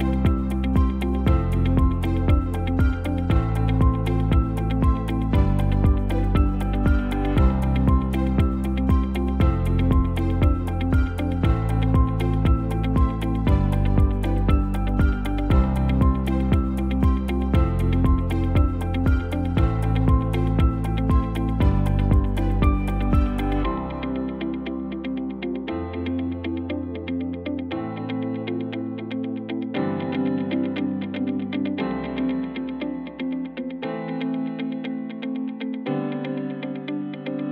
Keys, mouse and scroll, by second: 2.9 space, 4.6 ctrl+s, 9.3 space, 12.2 space, 16.4 space, 32.8 space.